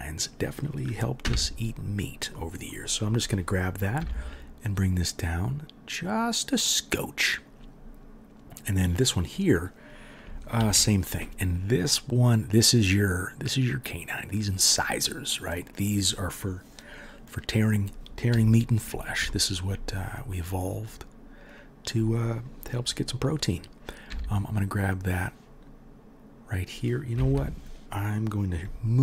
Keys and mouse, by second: 1.2 2, 1.6 middle click, 1.6 right click, 4.0 g, 10.5 ctrl+r, 24.1 g, 28.9-29.0 alt+middle drag.